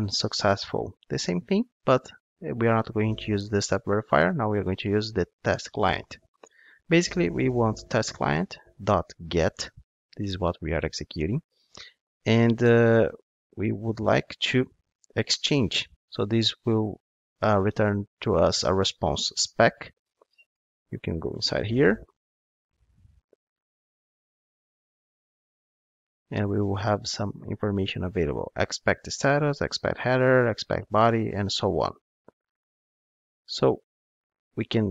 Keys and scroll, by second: 5.7 Return, 14.9 Return, 21.2 super+b, 21.3 super+b.